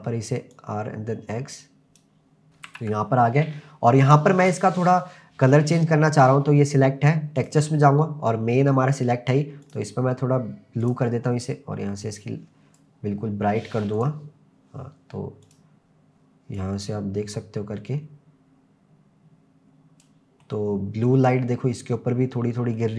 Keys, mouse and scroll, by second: 0.5 click, 2.5 click, 2.5 scroll up 3, 2.7 ctrl+s, 4.8 click, 5.8-7.4 scroll down 1, 7.4 click, 7.4 scroll down 1, 9.7 click, 13.9 click, 15.5 click, 20.4-21.1 middle drag, 21.4-22.4 scroll up 4, 22.4-22.7 scroll down 1, 22.7-22.9 middle drag.